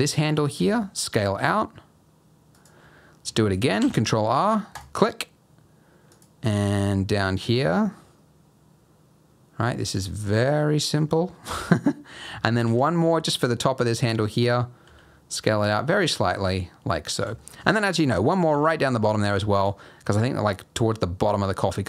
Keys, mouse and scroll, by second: 0.5 s, 3.7 ctrl+r, 6.4 s, 10.6-11.0 scroll down 1, 11.0-12.2 scroll up 1, 12.6 ctrl+r, 14.8 s, 16.4-16.9 scroll down 2, 16.9-17.2 scroll up 2, 17.4 shift+middle click, 17.7-18.4 scroll up 3, 18.5 ctrl+r.